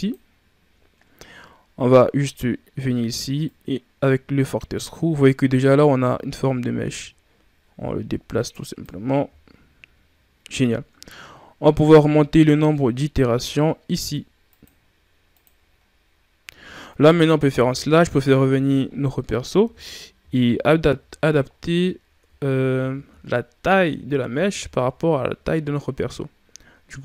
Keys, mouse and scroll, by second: 3.3-6.3 drag, 9.0-9.3 scroll down 1, 9.3 shift+scroll up 5, 14.3-15.7 drag, 15.7 scroll down 5, 17.2 KP_Divide, 18.7 shift+scroll up 5, 19.5 KP_3, 20.7 ctrl+scroll up 3, 21.3 scroll up 4, 22.1 Tab, 22.6 a, 22.9 a, 24.1-27.0 scroll down 2, 24.2 Tab.